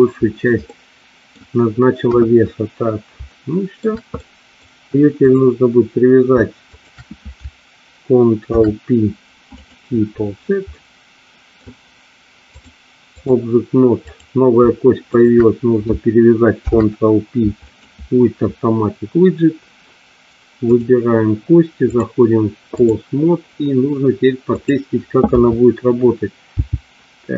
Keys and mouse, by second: 0.8 middle click, 2.2 KP_1, 3.4 shift+middle click, 4.2 middle click, 5.4 click, 6.8 shift+click, 8.6 ctrl+p, 10.9 middle click, 12.8 click, 14.3 click, 15.1 shift+click, 16.6 ctrl+p, 20.8 click, 22.0-23.0 drag, 24.6 click, 25.4 KP_3, 26.8 g.